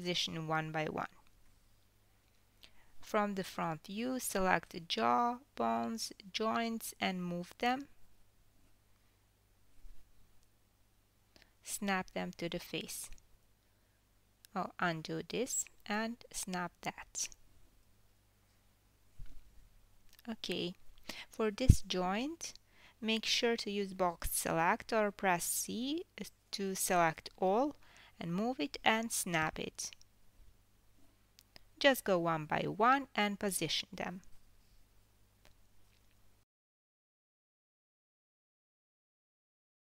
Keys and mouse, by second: 0.6 g, 5.1 click, 5.9 KP_3, 7.3 g, 7.5-11.2 ctrl+middle drag, 11.2 click, 12.0 g, 14.0 click, 14.8 f, 15.2 g, 16.6 ctrl+z, 16.9 ctrl+z, 17.8 g, 22.1-23.5 middle drag, 23.5 click, 23.6-24.6 middle drag, 24.6-31.0 drag, 25.9 KP_1, 28.1 KP_3, 29.3 g, 31.0-32.3 middle drag, 32.4 drag, 33.2 KP_1, 34.5 g, 34.8-36.2 ctrl+middle drag, 36.6 click, 37.3 g.